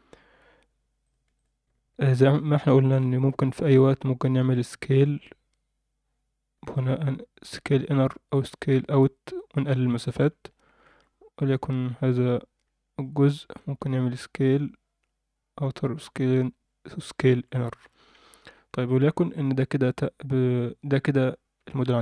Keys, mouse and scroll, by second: 1.0 click, 1.3 click, 2.0 alt+a, 3.1 click, 6.6 s, 10.9 alt+a, 11.4 click, 12.9 click, 13.6 s, 17.8 Tab, 18.7 Tab, 20.4 click, 21.6 Tab, 21.6 scroll down 2.